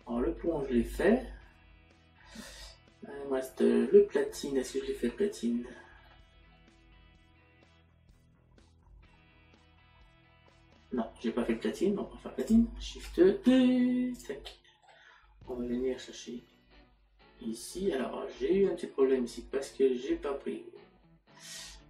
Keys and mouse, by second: 6.1 middle click, 17.5 middle click.